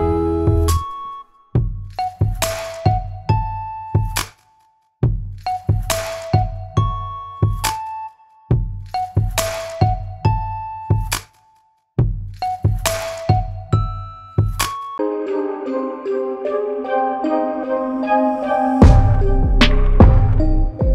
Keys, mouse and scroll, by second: 0.5 Tab, 0.9 click, 1.9 s, 3.8 click, 4.4 s, 5.4 click, 6.0 s, 6.8 s, 7.5 click, 7.9 s, 8.6 click, 9.0 s, 10.4 click, 11.0 g, 13.3 middle click, 14.0 click, 14.7 click, 15.5 scroll up 2, 15.8-16.2 scroll down 1, 19.0 click, 19.8 click, 20.2 scroll down 1, 20.4-20.8 scroll up 2, 20.8 shift+middle click.